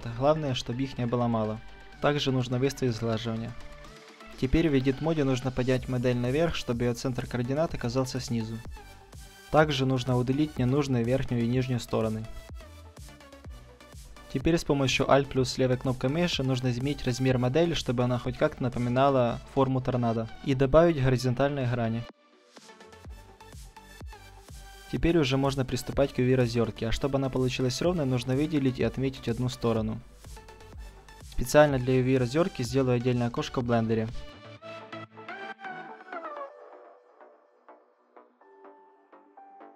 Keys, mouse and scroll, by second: 1.8-4.8 drag, 3.5-5.9 middle drag, 4.8 Tab, 5.9-11.0 drag, 9.6-10.1 middle drag, 10.1-12.7 right drag, 10.4 Delete, 11.4 Delete, 12.7 middle click, 12.8-13.4 right drag, 13.7-14.8 drag, 14.3-15.6 right drag, 14.8 s, 16.7 s, 16.8-18.0 drag, 17.2-19.2 right drag, 18.0 s, 19.2-20.3 drag, 19.3-20.5 middle drag, 20.8 ctrl+r, 23.3-25.0 drag, 24.8 a, 25.0-26.6 middle drag, 26.6-28.4 right drag, 28.3 ctrl+e, 30.2 a, 30.5-32.4 middle drag, 33.2-35.0 drag, 36.3 click, 39.4 a.